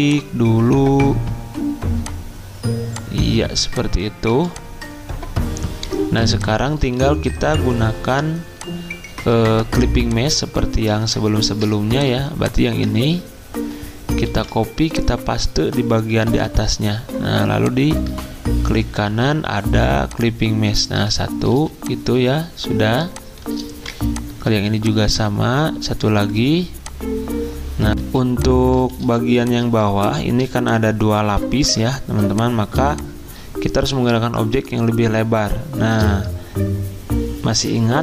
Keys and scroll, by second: 4.3 z, 6.5 alt+2, 12.9 z, 14.2 c, 16.3 f, 21.5 z, 23.7 v, 27.9 Delete, 28.0 z, 28.6 z, 29.0 z, 29.8 z.